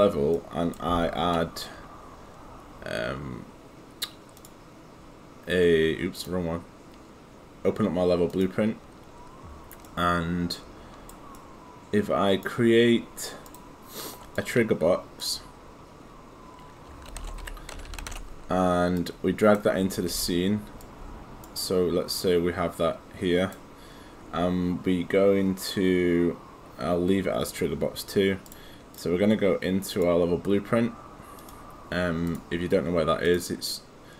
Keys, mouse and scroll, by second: 0.3 right click, 4.4 click, 9.9 right click, 13.5 click, 14.1 right click, 15.2 click, 16.9-18.6 typing, 19.0 click, 20.1 g, 20.8 click, 28.5 click, 29.9 right click, 31.4 click.